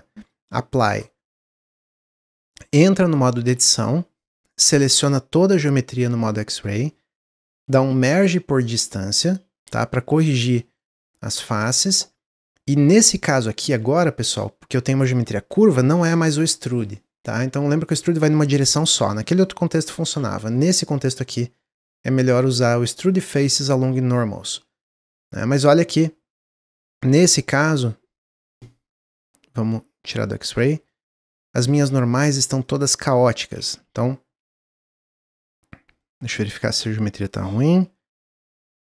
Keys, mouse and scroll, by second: 1.5-2.6 middle drag, 2.6 Tab, 3.2-4.9 shift+middle drag, 4.9 click, 7.8 m, 9.8-10.2 scroll up 1, 10.2-16.5 shift+middle drag, 16.7-19.7 drag, 27.0 z, 30.4 click, 30.8-32.6 middle drag, 32.6-33.6 drag, 33.6 ctrl+z, 33.8 ctrl+z, 34.3 ctrl+z, 34.6 click, 35.3 a, 35.9 middle click, 36.3 scroll up 1, 36.6 click, 37.2 click, 37.8 ctrl+z.